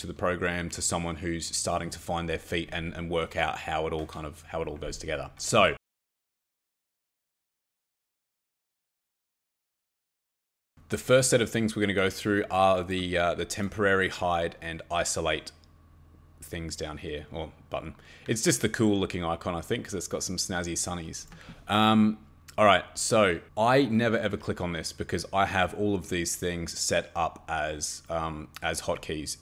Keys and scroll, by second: 24.3 Escape.